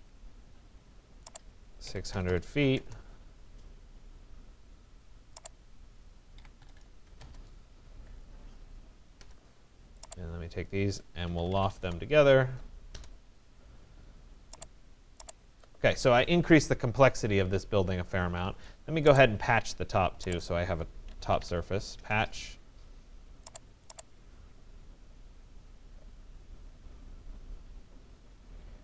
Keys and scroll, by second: 1.9 6, 2.2 0, 2.8 Return, 6.4 6, 7.1 0, 7.2 Return, 21.6 Return.